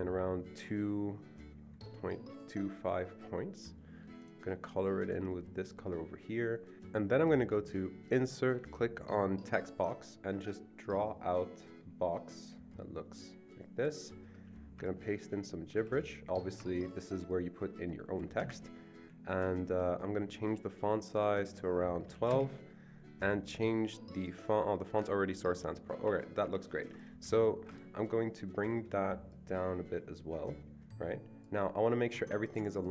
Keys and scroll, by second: 15.8 ctrl+v, 18.4 ctrl+v, 18.4 BackSpace, 19.3 ctrl+a, 22.1 typing, 26.1 Escape, 26.4 Escape, 27.3 Escape.